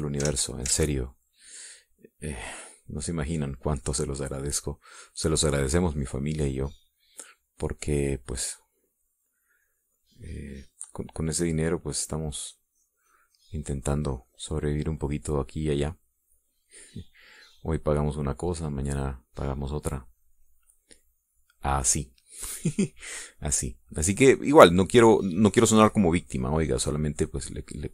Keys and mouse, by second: 0.6 click, 1.6 ctrl+z, 2.5-4.5 ctrl+drag, 5.4 middle click, 6.1 click, 7.0 click, 7.8 click, 8.5 click, 12.0-13.3 drag, 14.9-17.4 drag, 17.8-19.0 drag, 20.0-27.9 drag.